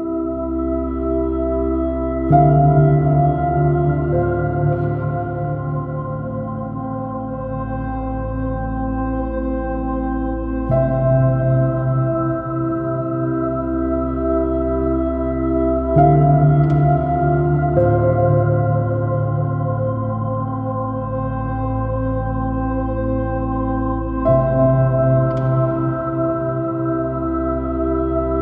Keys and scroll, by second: 1.7 super+space, 9.6 super+space, 10.7 super+space, 14.5 space, 15.0 super+z, 16.1 super+z, 16.8 super+z, 17.4 super+-, 22.5 super+-.